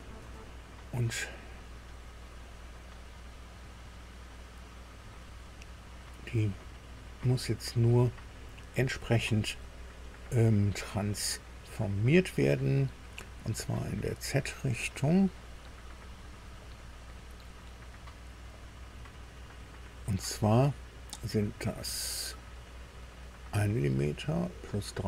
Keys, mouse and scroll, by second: 0.0 scroll down 1, 5.4 scroll up 1, 6.7-11.7 drag, 14.6-15.6 drag, 17.4 click, 17.9 click, 18.4 click, 19.0 click, 19.5 click.